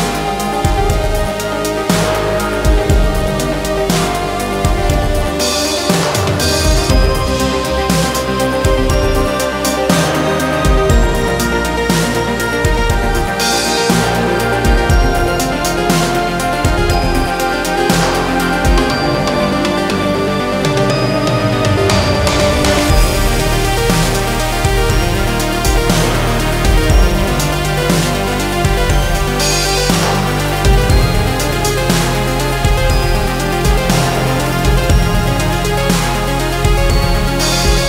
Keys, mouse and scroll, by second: 1.0 click, 13.4 click, 25.4 click.